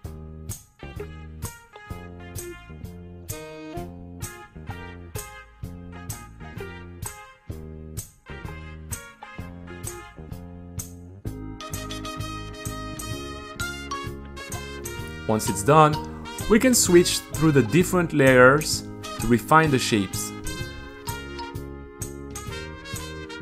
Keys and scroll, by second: 4.8-11.4 typing, 5.5 Delete, 7.2 Delete, 9.6 super+a, 11.4 super+r, 13.3 g, 13.6 super+a, 13.8 t, 15.4 Escape, 15.6-17.1 typing, 17.1 super+r, 19.6-23.4 typing.